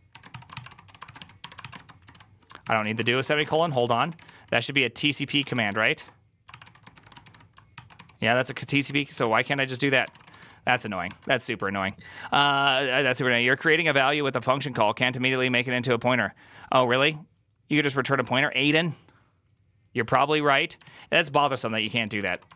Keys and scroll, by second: 0.0-10.8 typing, 7.6 ctrl+c, 21.2-22.5 typing.